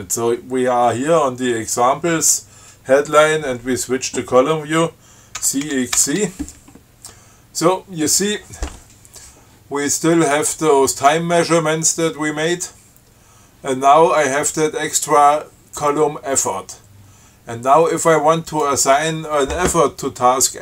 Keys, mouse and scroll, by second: 5.7 ctrl+c, 6.0 ctrl+x, 6.2 ctrl+c, 18.8 click.